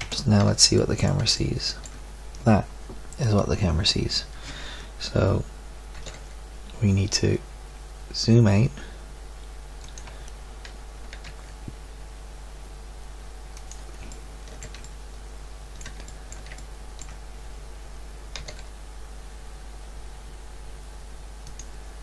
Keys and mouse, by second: 0.0 Escape, 0.0 0, 0.8-1.8 middle drag, 5.9 g, 11.1 g, 18.4 g.